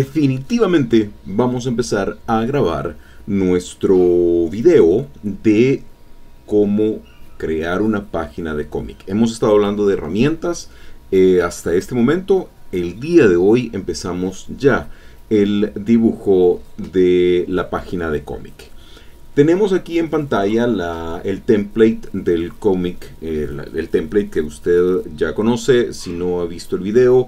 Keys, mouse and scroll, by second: 22.9-24.6 drag.